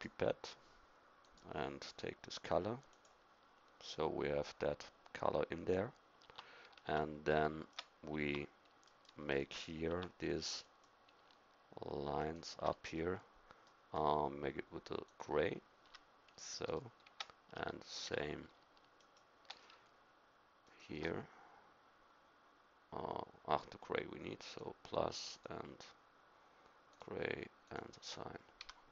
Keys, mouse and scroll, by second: 6.2 Tab, 6.8 Tab, 8.1 Tab, 8.8 middle click, 9.9 Tab, 12.2 right click, 15.8 a, 17.5 Tab, 18.1 Tab, 28.6 a.